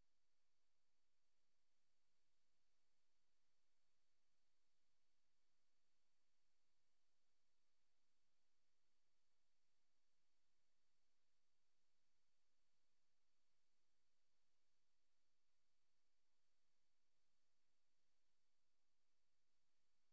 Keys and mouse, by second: 1.8 click, 3.2 click, 3.7 click, 4.8 click, 10.3-11.6 drag, 13.8 Right, 14.7 click, 17.0 click, 17.6 click.